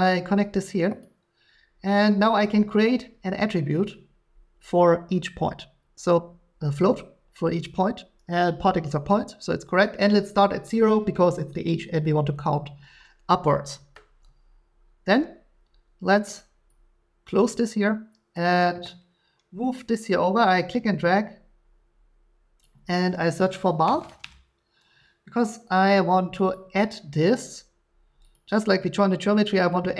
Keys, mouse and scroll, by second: 1.0 click, 6.1 click, 16.2 click, 18.3 click, 22.6 click, 23.8-24.2 typing, 26.5 click, 28.3 click.